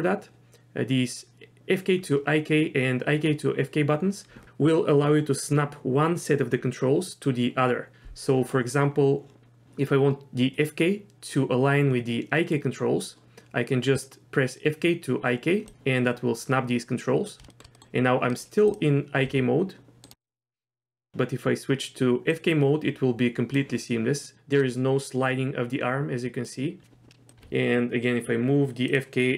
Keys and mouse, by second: 17.5 shift+middle click, 17.7 middle click, 18.3 middle click, 19.2 g, 20.1 click, 21.1 g, 22.4-23.5 drag, 24.6-26.5 drag, 27.3 r.